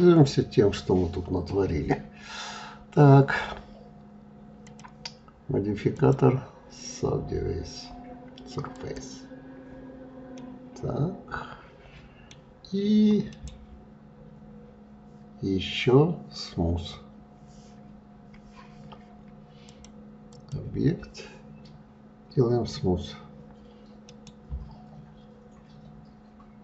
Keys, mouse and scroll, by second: 4.2 click, 5.5-8.7 drag, 9.9-12.9 middle drag, 12.9-19.2 right drag, 19.2-22.3 drag, 23.6-26.6 right drag.